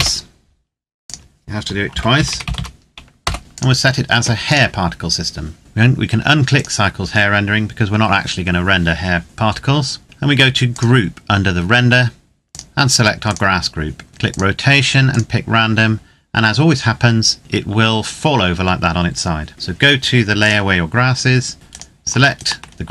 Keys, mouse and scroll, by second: 0.7 click, 1.6-2.3 typing, 2.9 Return, 3.4 click, 5.6-6.3 scroll down 1, 6.3 click, 10.5 click, 17.4-19.0 scroll up 1, 20.2 click, 20.9-21.5 scroll down 1, 21.5 right click, 22.1 shift+right click.